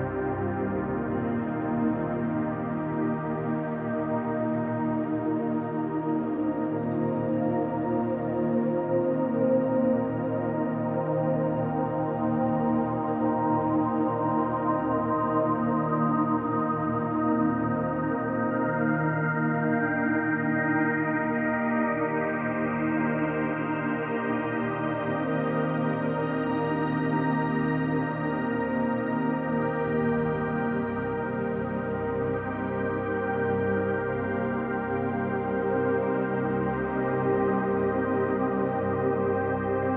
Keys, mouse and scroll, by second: 1.0-2.4 scroll down 1, 2.4 scroll down 1, 2.4-3.7 drag, 4.1 s, 5.1 click, 5.5-6.4 middle drag, 6.6-7.0 scroll up 1, 7.0-8.3 middle drag, 9.0 KP_7, 10.0-10.4 scroll down 2, 10.4-10.9 shift+middle drag, 11.2-11.7 scroll up 2, 12.0-13.3 scroll up 6, 13.4-14.0 shift+middle drag, 15.1 ctrl+r, 18.2 click, 19.3 ctrl+r, 22.1 click, 22.6-24.6 middle drag, 25.6 3, 26.1 click, 27.3-28.6 middle drag, 29.2 shift+click, 29.6-30.1 middle drag, 30.8 right click, 32.2 middle click, 33.7 click, 35.3 click, 36.0-36.5 middle drag, 36.7-37.7 scroll down 2, 38.2 KP_7, 39.1-39.9 scroll down 1.